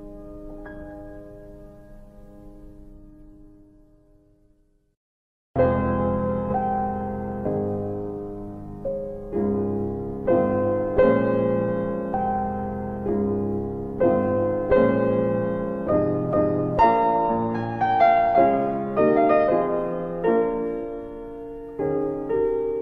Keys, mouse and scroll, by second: 1.8 click, 2.2-2.6 typing, 3.3 click, 5.1 click, 5.7-6.8 typing, 8.8 click, 11.3 click, 14.1 click, 16.7 alt+middle click, 18.2 click, 19.2 alt+middle click, 19.9 click, 20.9 alt+i, 22.5 alt+click.